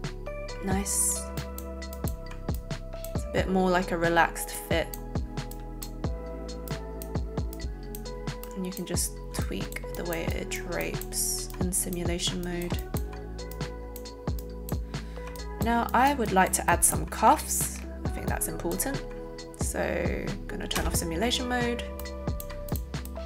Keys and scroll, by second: 20.7 space.